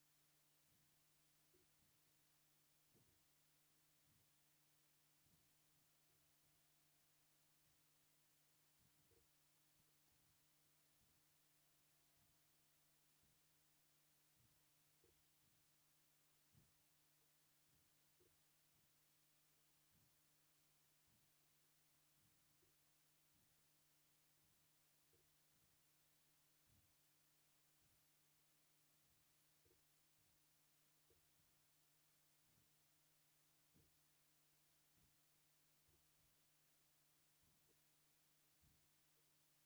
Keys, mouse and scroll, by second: 0.1 click, 0.6 scroll up 3, 0.8 click, 1.2 scroll down 1, 1.5 g, 2.1 shift+middle click, 2.6 click, 3.1 g, 3.7 scroll down 3, 3.7 shift+middle click, 4.3 scroll up 2, 4.5 click, 4.9 middle click, 5.1 scroll up 1, 5.3 click, 6.1 g, 6.9 shift+middle click, 7.3 click, 7.6 shift+click, 9.1 g, 9.8 scroll down 3, 9.9 shift+middle click, 10.9 Tab, 11.5 middle click, 11.8 Tab, 12.1 shift+middle click, 12.8-13.2 scroll up 1, 13.2 click, 13.6-14.3 scroll up 1, 14.3 click, 14.5 shift+click, 15.0 g, 16.3 scroll down 1, 16.4 shift+middle click, 16.6 shift+middle click, 16.8 scroll up 2, 16.9 shift+middle click, 17.4 click, 18.2 g, 19.6 shift+middle click, 20.0 middle click, 20.1 click, 20.4 shift+click, 21.6 scroll up 3, 21.7 shift+middle click, 21.9 click, 22.6 g, 23.4 scroll down 3, 23.5 shift+middle click, 23.6 shift+middle click, 23.8 middle click, 24.2 click, 25.1 g, 26.0 scroll down 2, 26.0 shift+middle click, 27.1 shift+middle click, 27.9 shift+middle click, 28.0 middle click, 28.2 scroll up 2, 28.4 middle click, 28.8 click, 29.7 g, 30.3 shift+middle click, 30.7 middle click, 31.1 g, 31.6 shift+middle click, 32.3 click, 32.6 click, 32.7 scroll up 2, 32.8 shift+middle click, 33.4 shift+click, 33.8 g, 34.5 scroll down 1, 34.6 shift+middle click, 34.9-35.3 scroll up 2, 35.3 click, 35.9 g, 36.5 shift+middle click, 36.7 shift+middle click, 36.8 middle click, 37.1 click, 37.3 shift+click, 37.6 g, 38.5 scroll down 3, 38.6 shift+middle click, 38.9 shift+middle click, 39.3 Tab, 39.5 middle click.